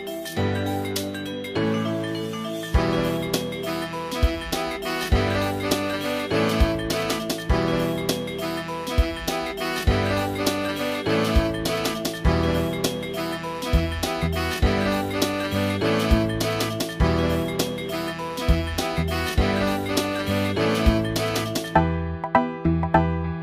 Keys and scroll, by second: 0.9 space, 20.5 space, 20.9 space, 21.8 space, 22.8 space.